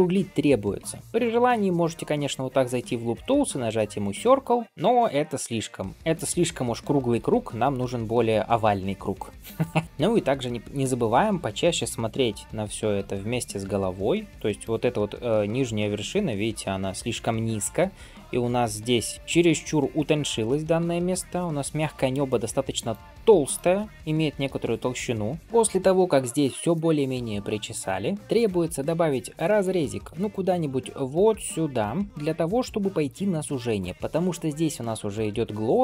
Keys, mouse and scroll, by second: 0.6 g, 1.0 g, 1.1 alt+click, 1.7-4.2 right drag, 4.6 middle click, 5.4 middle click, 7.3 ctrl+z, 9.8 click, 9.8 scroll down 1, 10.0 scroll up 2, 10.7 shift+middle click, 12.8 g, 16.0-16.7 scroll up 1, 19.1-20.3 scroll down 1, 20.7 g, 23.3 click, 24.3 g, 25.4 shift+middle click, 26.6 middle click, 28.3 middle click, 28.8 shift+middle click, 29.2 middle click, 30.3 ctrl+r, 32.1 shift+middle click, 32.6 shift+middle click, 33.0 middle click, 33.9 alt+z, 33.9 click, 35.0 middle click.